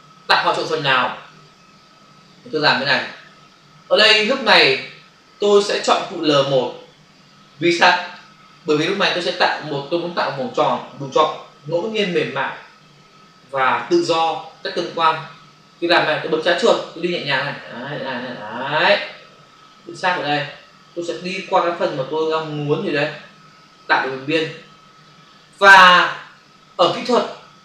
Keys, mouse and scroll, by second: 6.4 click, 17.3 click.